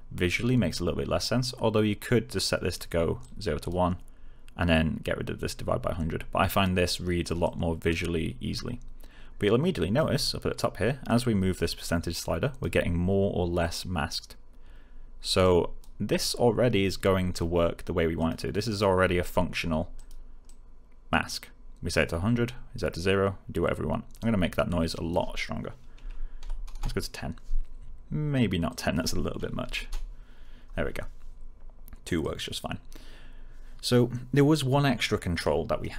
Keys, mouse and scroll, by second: 3.1-3.8 click, 7.4-10.2 click, 25.9-26.3 typing, 26.6 Return, 28.6 click, 29.6 2, 29.8 Return, 32.1-35.9 click.